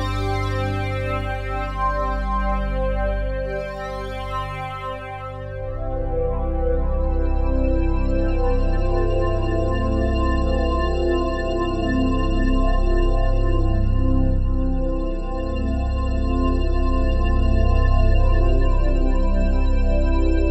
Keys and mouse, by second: 0.0-3.5 drag, 3.5 ctrl+s, 4.3-5.7 drag, 8.0-8.7 typing, 10.1-11.0 typing, 12.8 click, 15.7 click, 19.4 ctrl+z.